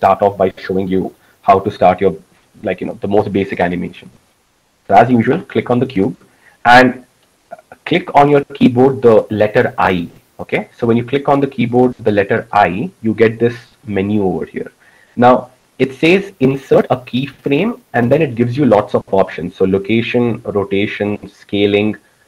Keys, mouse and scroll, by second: 2.2 a, 13.0 i, 14.2 click.